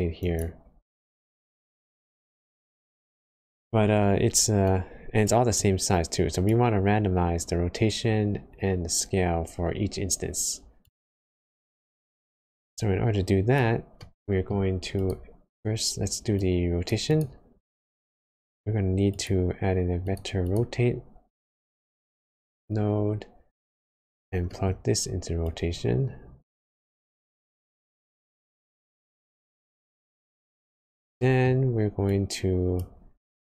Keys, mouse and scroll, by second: 5.5 click, 12.2 click, 13.9 middle click, 14.6 scroll up 1, 16.3 click, 17.5 shift+a, 24.5 middle click, 25.4 click, 27.6 click, 31.1 middle click, 32.0 click, 33.1 click.